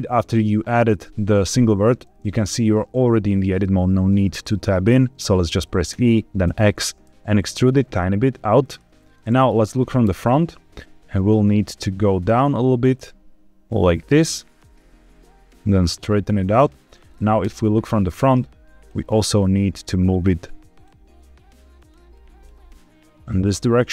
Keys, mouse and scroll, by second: 5.8 e, 6.4 x, 8.5 click, 9.1 ctrl+z, 10.0 KP_1, 11.0 e, 12.2 click, 12.5 e, 14.4 click, 14.7 e, 16.7 click, 17.3 KP_7, 18.3 click, 19.0 g, 20.0 click, 20.4 click, 20.9 g, 21.7 click, 22.0 click, 22.5 g.